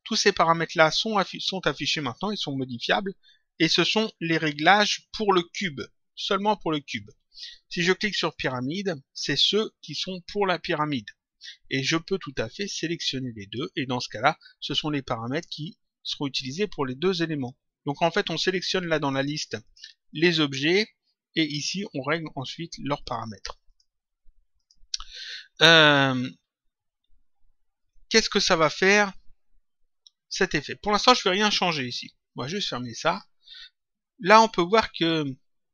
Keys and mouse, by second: 8.2 click, 12.3 click, 18.0 click, 19.1 click, 22.9 click, 25.7 click, 32.5 click.